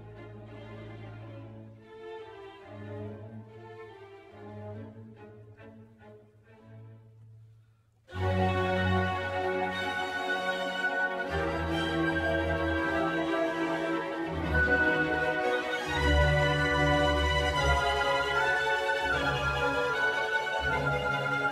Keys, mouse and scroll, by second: 0.6-2.0 middle drag, 2.0 r, 8.4 g, 11.2-11.8 scroll up 4, 11.8 click, 12.1-17.6 middle drag, 17.6-21.5 drag.